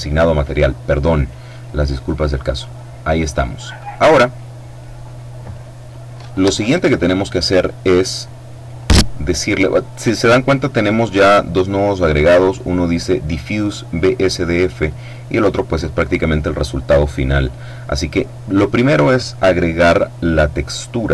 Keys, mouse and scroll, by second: 1.1-2.6 drag, 2.9-4.1 drag, 4.3-5.5 drag, 8.3-10.4 drag, 10.4-11.3 scroll up 1, 11.4-11.9 scroll down 2, 13.9 click, 17.3-18.7 drag.